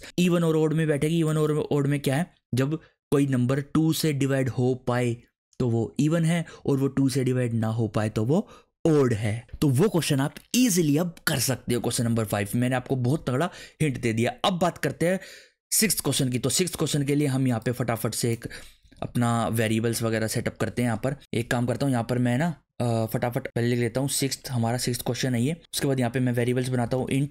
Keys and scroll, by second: 18.9 ctrl+/, 19.5 Right, 19.9 Down, 21.2 ctrl+Return, 22.7 Return, 24.2 6, 25.4 ctrl+/, 25.6 Return, 26.8-27.3 typing.